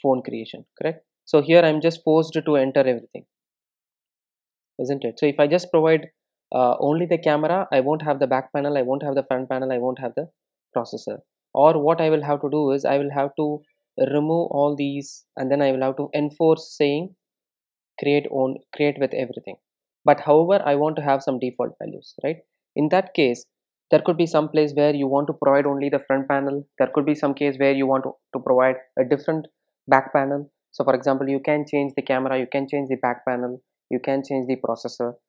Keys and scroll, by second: 19.1 super+e, 23.9 super+e, 25.5 super+z.